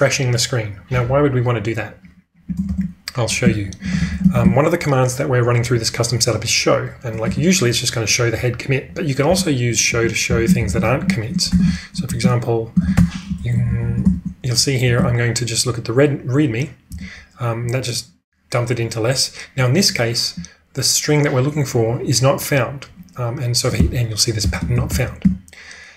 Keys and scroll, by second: 2.6 ctrl+space, 3.1-4.8 typing, 6.2-6.9 typing, 7.3 Return, 9.2 q, 10.3-12.9 typing, 12.8 ctrl+e, 13.5 ctrl+w, 14.6-15.4 typing, 16.9 Return, 23.7-25.7 typing.